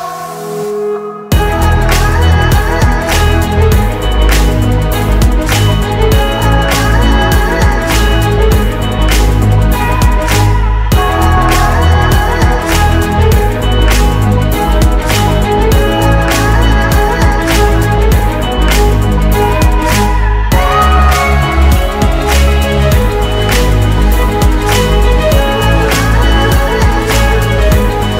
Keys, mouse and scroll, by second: 0.2 typing, 1.3 typing, 1.8 Return, 2.6 typing, 8.7-11.0 typing, 17.4-19.8 typing.